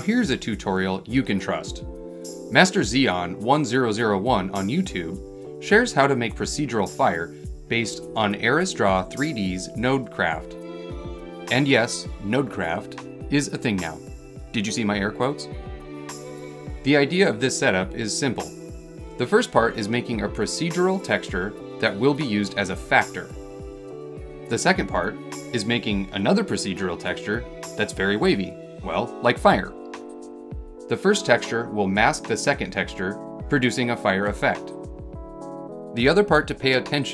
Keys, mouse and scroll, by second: 0.6 space, 3.4-3.9 scroll up 2, 3.9 middle click, 4.4 scroll up 2, 4.9 middle click, 6.2 scroll down 2, 6.5 middle click, 7.0 scroll down 2, 7.7-10.4 middle drag, 10.4 scroll up 2, 10.8 middle click, 11.3 scroll up 2, 12.8 middle click, 13.6-13.9 scroll down 2, 13.9-17.7 middle drag.